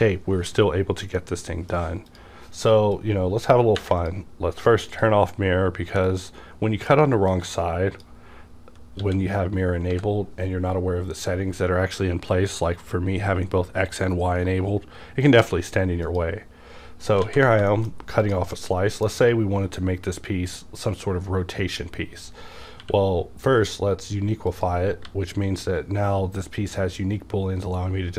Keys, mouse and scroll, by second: 2.1 click, 2.9-9.0 drag, 9.0 w, 9.9-12.0 drag, 9.9 x, 16.1 click, 17.2 alt+a, 17.7 shift+middle click, 17.9 scroll up 1, 18.2 click, 18.5-22.8 middle drag, 22.8-24.5 middle drag, 22.8 q, 24.5 click, 25.0 g.